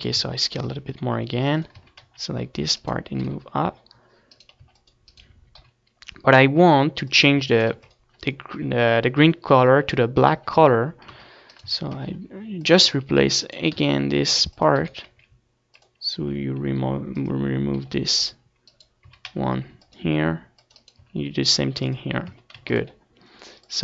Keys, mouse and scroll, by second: 0.6 Tab, 1.3 Tab, 2.2 Tab, 2.6 s, 3.4-5.2 drag, 3.6 a, 3.8 c, 4.7 right click, 5.1 g, 5.3-8.6 right drag, 6.3 c, 7.4 g, 8.9 click, 9.4 Tab, 9.5 ctrl+s, 9.7 click, 12.3 Tab, 12.7 c, 13.3-15.0 right drag, 13.3 a, 13.6 c, 15.0 middle click, 15.1 right click, 15.3 s, 16.0-20.3 drag, 16.2 right click, 16.4 g, 17.7 s, 19.4 g, 20.6 a, 20.7-22.0 right drag, 20.8 c, 22.4-23.8 right drag, 22.6 s, 23.4 click.